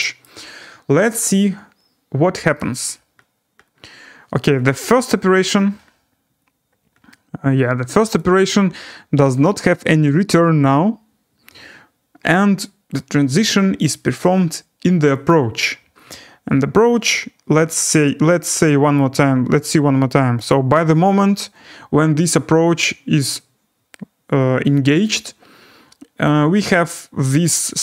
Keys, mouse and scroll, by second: 0.2 right click, 2.5 click, 2.6-5.0 scroll, 5.3-5.7 scroll, 6.1-7.1 scroll, 8.1 click, 15.2 click, 15.8-16.4 scroll, 18.9 click, 20.5 click, 26.9 click.